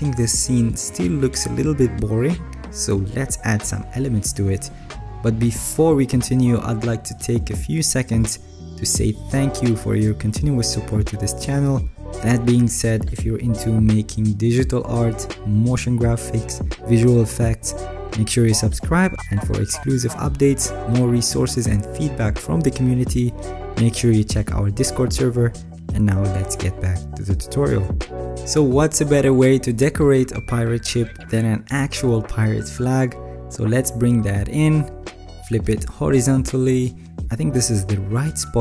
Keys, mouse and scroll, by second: 37.5 ctrl+t.